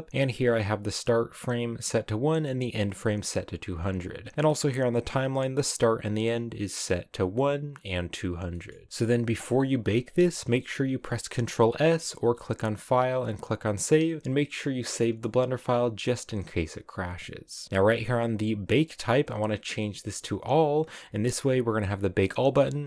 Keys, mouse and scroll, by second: 20.7-22.8 drag.